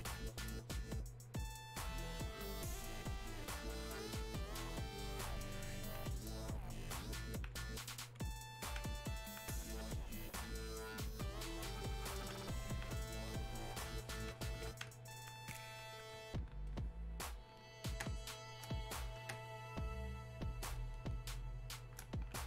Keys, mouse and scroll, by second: 9.2-16.7 alt+drag, 16.7-18.0 ctrl+drag, 18.0 ctrl+space.